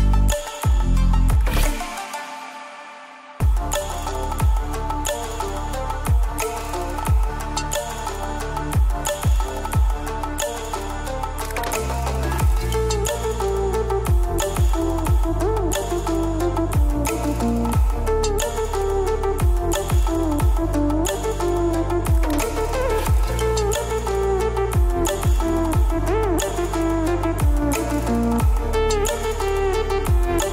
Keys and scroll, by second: 9.4 ctrl+t, 14.9 ctrl+z, 21.1 ctrl+t, 24.2 ctrl+t.